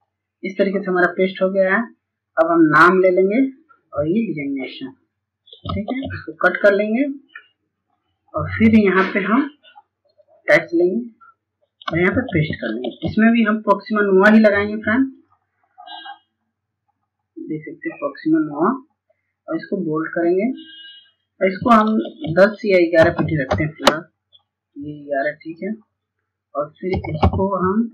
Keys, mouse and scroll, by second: 5.5 click, 6.4-6.9 scroll down 1, 6.9 scroll up 1, 9.2 click, 14.4 click, 22.3 KP_1, 24.6 click, 26.2 End, 26.4 Home.